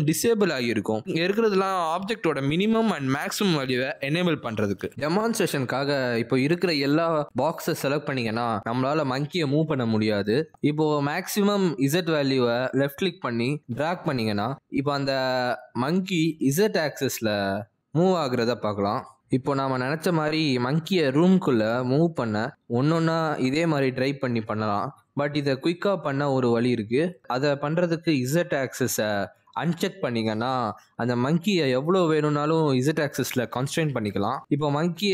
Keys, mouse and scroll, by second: 8.8 middle click, 10.8 click, 11.2 click, 11.8 click, 12.0 click, 12.5 middle click, 12.7 g, 14.6 click, 17.8 click, 21.4 g, 28.1 middle click, 29.7 middle click, 30.2 click, 30.9-31.6 scroll up 2, 31.1 shift+middle click, 31.6 click.